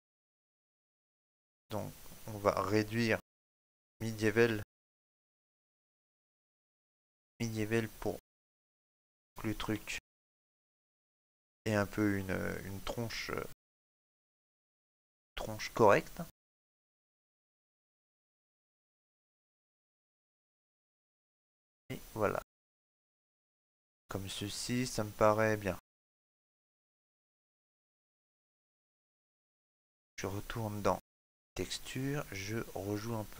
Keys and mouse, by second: 9.2 shift+middle click, 9.7 ctrl+middle click, 10.1 middle click, 11.5 ctrl+middle click, 13.8 click, 23.5 ctrl+middle click, 23.9 middle click, 25.6 ctrl+middle click, 27.5 click.